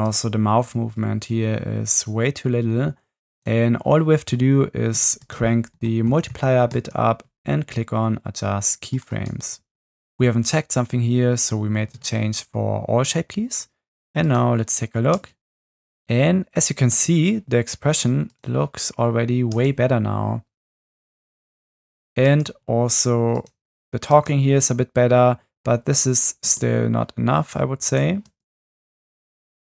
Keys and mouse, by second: 0.0 space, 5.3-6.8 drag, 9.0 click, 14.3 drag, 15.1 space, 16.9 space, 19.5 space, 22.3 space, 24.1 space, 26.4 space, 28.3 space.